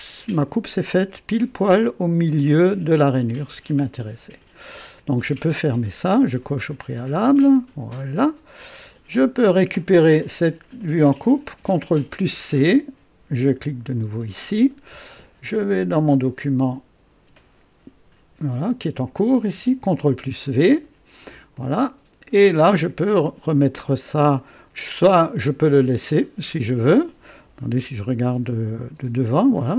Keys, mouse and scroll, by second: 3.1-4.6 drag, 6.5 click, 7.5 click, 9.4 click, 11.8 ctrl+c, 13.3 click, 15.5 click, 19.7 ctrl+v, 19.8 ctrl+v, 21.5-23.0 drag, 23.2 click, 24.3-26.8 drag, 27.8 KP_2, 28.7 KP_1, 29.5 scroll up 1.